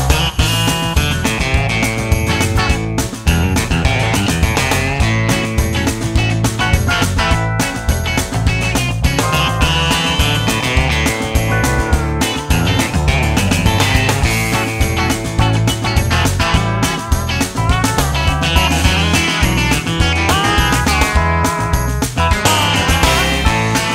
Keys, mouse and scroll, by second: 2.0-4.5 drag, 5.9 click, 8.5-12.2 middle drag, 11.7 click, 16.7-18.4 middle drag, 17.8 KP_0, 18.9 KP_7, 20.1 r, 21.5 KP_0, 22.6 click.